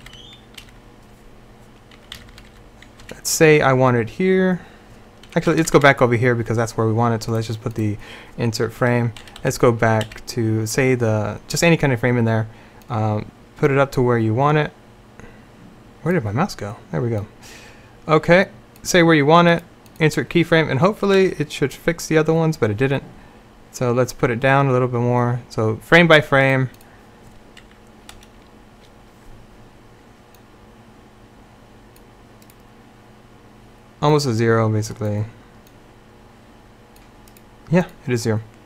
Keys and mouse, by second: 0.1 Right, 0.7-2.6 Right, 3.1 Left, 5.6 Right, 5.7 Right, 5.9 Right, 9.3 Left, 9.5 Left, 10.1 Left, 12.9-16.4 drag, 17.3-19.6 drag, 19.6-21.3 right drag, 21.3 Left, 28.2 Left.